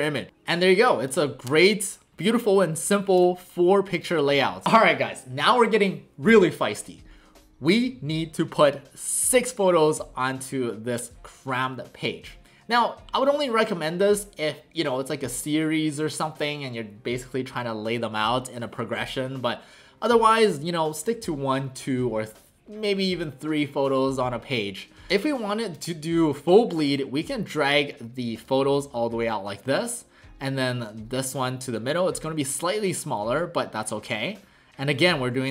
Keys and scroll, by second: 0.3 typing, 10.9 w.